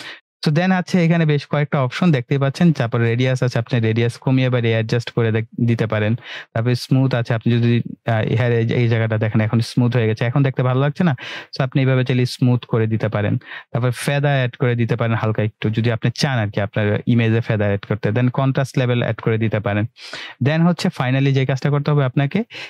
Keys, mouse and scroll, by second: 2.9-5.7 click, 7.0-8.3 drag, 10.6-12.2 drag, 21.5-22.6 scroll down 1.